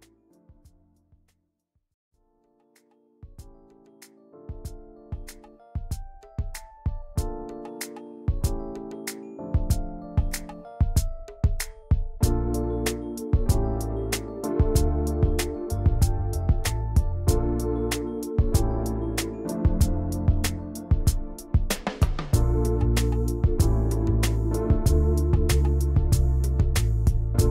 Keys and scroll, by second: 1.3 p, 4.1 v, 4.3 i, 5.1 v, 12.1 m, 14.2-15.8 typing, 17.1 ctrl+shift+], 17.3 ctrl+a.